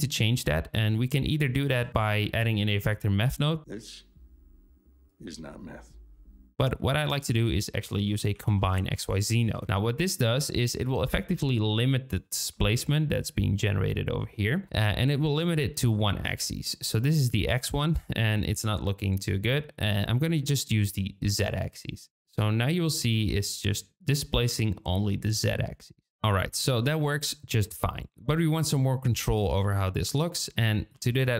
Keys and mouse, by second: 0.6 shift+middle click, 1.4 shift+a, 16.6-17.1 middle drag, 19.2-21.3 drag, 22.6-26.2 middle drag, 26.2 click, 29.2-29.7 drag, 30.9 shift+a.